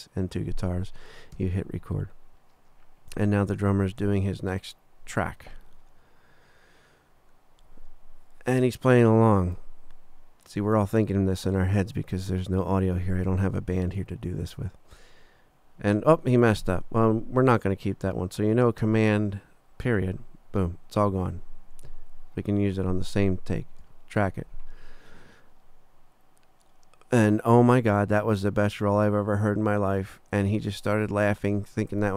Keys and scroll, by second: 1.3 3, 19.8 super+., 23.8 3.